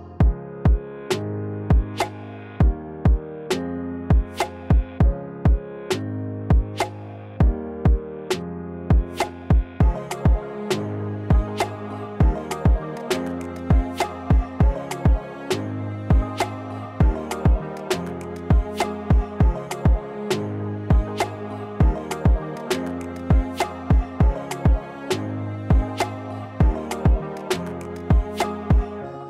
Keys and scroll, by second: 16.9 ctrl+z, 24.3 s.